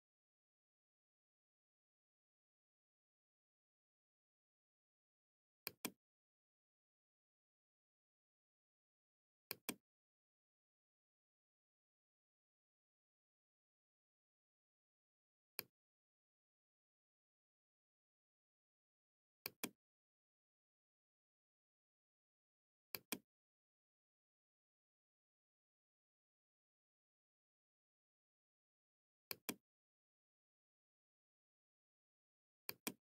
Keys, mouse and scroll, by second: 5.3-6.3 drag, 9.3 click, 15.4 click, 19.3 click, 22.8 click, 24.7 Escape, 29.2 click, 32.5 click.